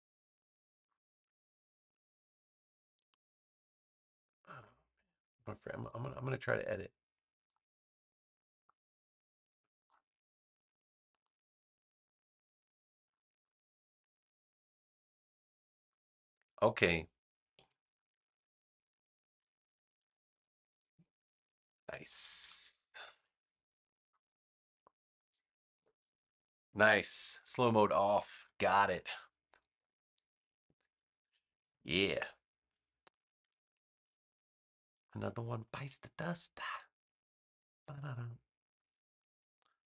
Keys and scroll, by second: 19.1-23.3 typing, 25.7 Return.